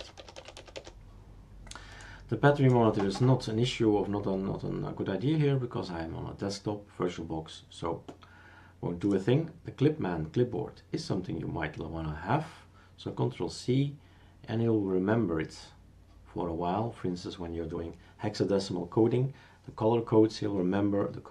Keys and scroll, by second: 0.0-0.8 typing.